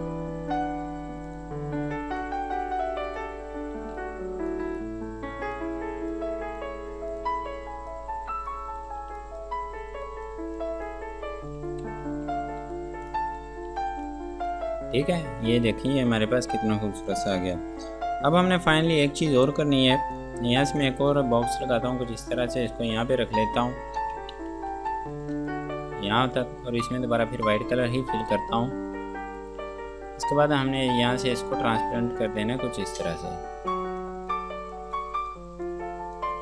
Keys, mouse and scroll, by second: 0.3 click, 9.2 F2, 9.4 click, 11.4 scroll down 1, 11.8 Escape, 12.1 F3, 13.3 click, 13.9 F2, 14.3 click, 20.4 click, 24.6-25.4 typing, 25.7 click, 29.6 right click, 31.0 click.